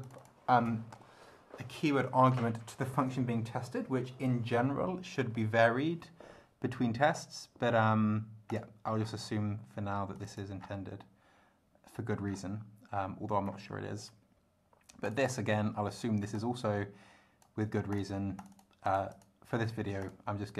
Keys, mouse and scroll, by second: 0.0 click, 8.5 click, 9.0 scroll down 1, 10.1 click, 12.3 scroll down 1, 13.0-13.7 scroll down 2, 15.0 click, 16.3-17.6 drag, 17.9 click, 18.4 click, 18.8 click, 20.0 click.